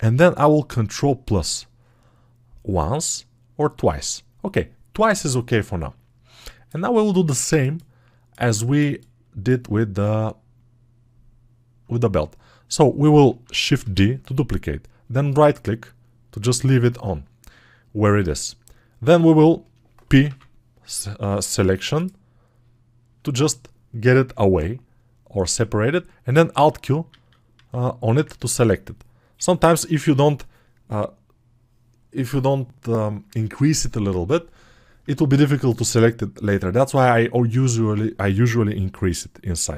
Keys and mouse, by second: 3.6-6.9 right drag, 8.6-25.7 alt+right drag, 25.7-39.7 alt+middle drag.